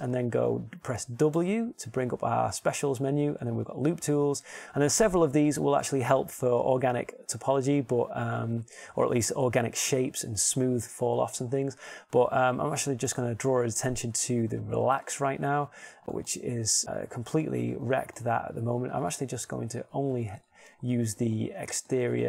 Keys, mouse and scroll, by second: 2.5 w, 17.0 middle click, 18.9 ctrl+z, 20.7 ctrl+Tab.